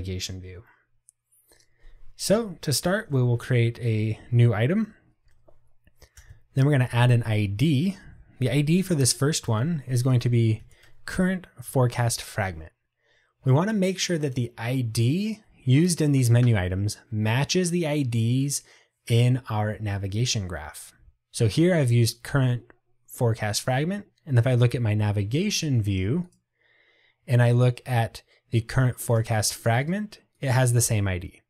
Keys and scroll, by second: 4.1 Tab, 8.2 Return, 11.8 Tab.